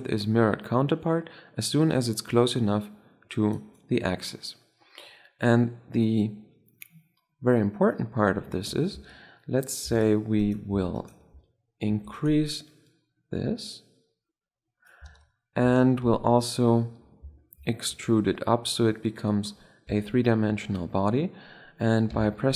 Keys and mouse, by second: 0.1-1.7 drag, 4.8-6.3 middle drag, 8.8 Tab, 9.8 Tab, 10.3-11.8 drag, 11.8 e, 12.5 middle click, 12.8-14.5 drag, 14.6 middle click, 14.9 Tab, 15.5 Tab, 15.9 a, 16.1 a, 17.8 e, 19.8 Tab, 20.0 Page_Down, 20.4 KP_7.